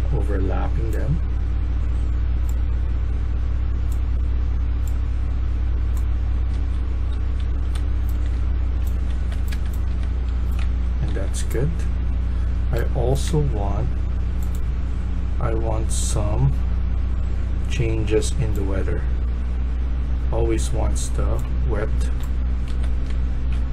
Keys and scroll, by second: 6.0-9.0 typing, 9.4 Escape, 9.8 Escape, 10.0-11.0 typing, 12.6-13.1 typing, 21.9-23.7 typing.